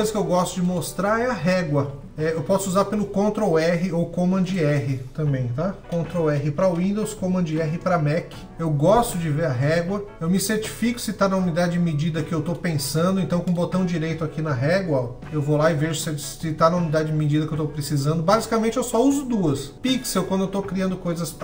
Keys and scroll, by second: 5.8 r, 6.2 super+t, 7.0 super+t.